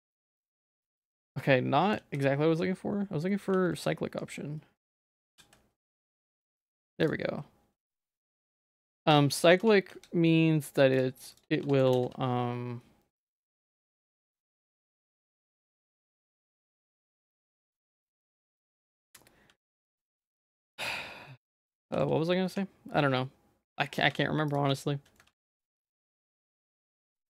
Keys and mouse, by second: 0.8 middle click, 2.0 ctrl+z, 3.6 ctrl+s, 5.2-6.6 drag, 7.0 click, 8.1 click, 8.5 z, 8.9 middle click, 9.2 shift+middle click, 9.6 Tab, 9.9 z, 11.6 Tab, 12.0 alt+x, 13.8 click, 14.2 z, 15.1 Tab, 15.4 click, 15.6 g, 16.6 Tab, 16.9 middle click, 17.6 shift+middle click, 18.1 middle click, 18.5 ctrl+s, 19.6 ctrl+s, 20.0 Tab, 20.3 Tab, 20.5 Tab, 20.7 middle click, 21.9 ctrl+x, 22.5 Tab, 23.0 middle click, 24.1 Tab, 25.2 ctrl+x, 25.6 Tab, 25.8 middle click, 26.6 middle click, 27.1 ctrl+z.